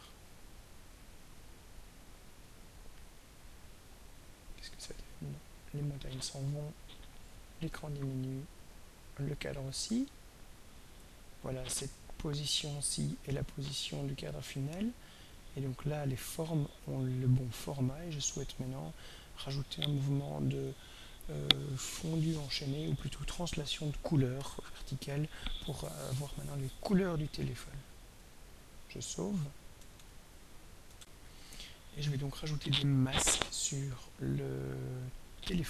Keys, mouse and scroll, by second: 2.0 click, 4.4-14.9 drag, 29.9 ctrl+s, 30.9 r, 33.2 click.